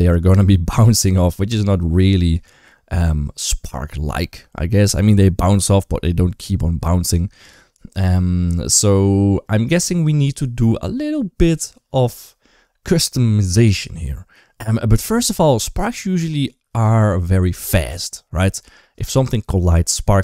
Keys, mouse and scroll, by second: 1.3 space, 5.7 space, 6.8 space, 16.1 click, 16.6 space, 17.5 space.